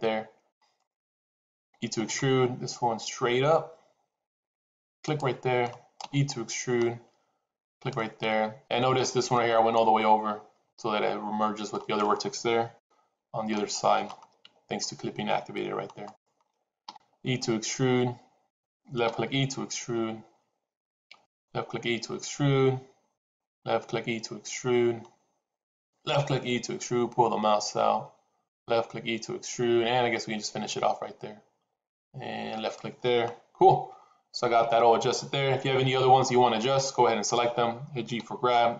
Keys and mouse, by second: 0.4 click, 1.5 e, 5.9 e, 11.6 click, 12.7 g, 16.7 e, 19.0 e, 21.3 e, 23.4 e, 25.9 e, 37.2 click, 38.0 g.